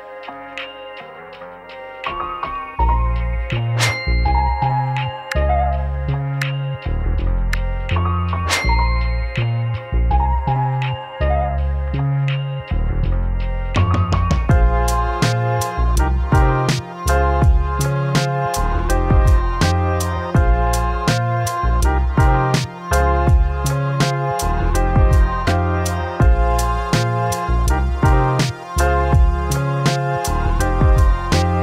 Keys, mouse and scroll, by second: 1.9 click, 6.2 right click, 8.8-14.7 drag, 20.4 click, 26.6-28.5 typing, 28.2 Tab, 29.8 click.